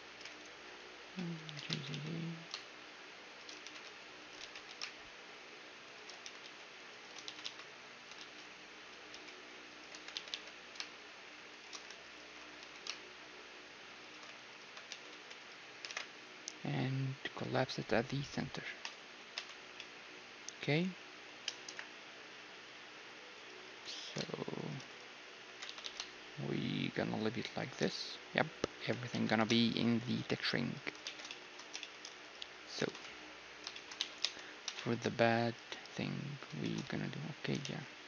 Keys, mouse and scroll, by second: 1.2 middle click, 1.5-3.3 drag, 1.5 g, 3.6 e, 4.4 ctrl+z, 4.7 s, 6.2 e, 7.2 ctrl+z, 7.4 ctrl+z, 8.2 ctrl+z, 9.1 s, 9.9 g, 12.0-14.0 right drag, 12.6 s, 14.5-18.1 right drag, 14.9 e, 16.0 alt+m, 19.4 Tab, 19.5-21.7 middle drag, 21.7 KP_1, 22.0 z, 22.4-23.4 middle drag, 23.1 z, 23.4-27.6 right drag, 23.7 g, 25.5 g, 27.9 z, 28.2-30.5 middle drag, 28.8 g, 30.9-36.9 middle drag, 31.0 z, 32.3-34.0 drag, 32.9 ctrl+s, 34.0 z, 34.2 Tab, 35.2 z, 35.7 z, 36.9 z, 37.6 ctrl+r.